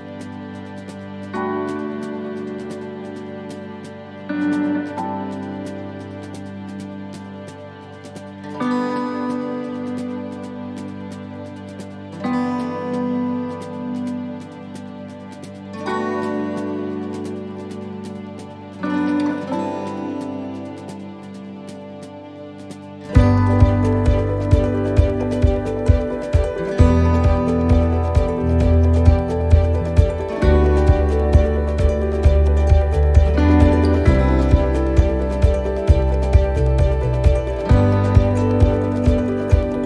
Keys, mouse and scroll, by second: 0.5 shift+middle click, 1.0-2.1 scroll up 4, 1.5 middle click, 2.1 shift+middle click, 2.7-3.0 scroll up 1, 3.0 middle click, 3.4 scroll down 1, 3.9 middle click, 4.5 shift+middle click, 5.0 scroll up 4, 5.3 middle click, 6.0 shift+middle click, 10.0 shift+middle click, 10.0 click, 12.1 click, 22.0 right click, 22.3 middle click, 24.6 click, 25.4 right click, 26.3 click, 28.2 middle click, 29.3-29.6 scroll down 3, 29.6 middle click, 30.6 click, 32.1 middle click, 32.6 shift+middle click, 32.9-33.6 scroll up 5, 33.6 middle click, 34.6 e, 37.1 s, 38.1 middle click, 38.5 scroll down 3, 38.8 shift+middle click.